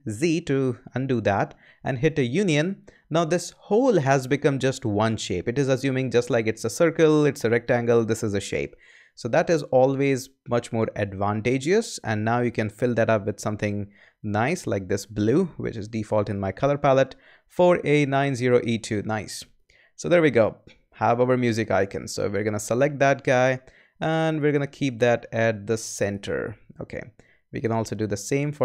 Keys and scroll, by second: 0.1 super+z.